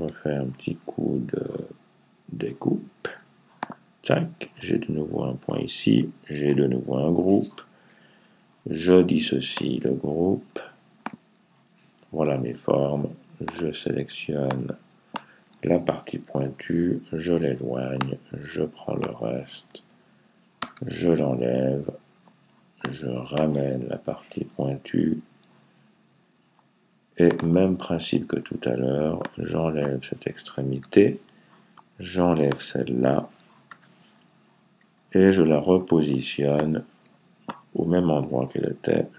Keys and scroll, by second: 16.2 Left, 23.8 Right, 38.6 Left.